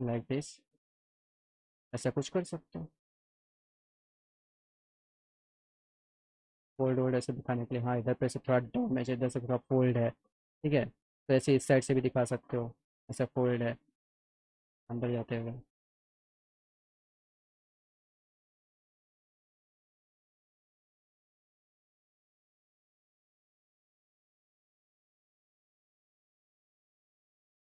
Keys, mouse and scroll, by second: 0.8 alt+middle click, 2.4 click, 2.8 click, 3.1 middle click, 3.6 alt+middle click, 4.5 alt+middle click, 5.4 F3, 6.7-8.2 alt+middle drag, 9.9 middle click, 10.7 alt+middle click, 11.0 alt+middle click, 11.8 alt+middle click, 13.3 alt+middle click, 14.2 middle click, 14.9 alt+middle click, 15.7 click, 17.4 click, 19.1 click, 20.7 F3, 23.5 click, 23.8 alt+middle click, 25.2-27.2 drag.